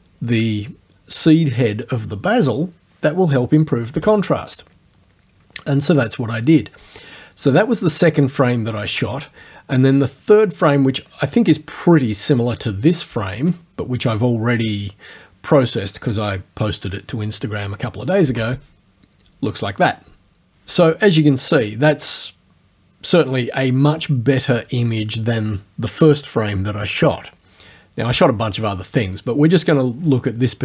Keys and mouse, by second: 4.0 space, 18.3 space.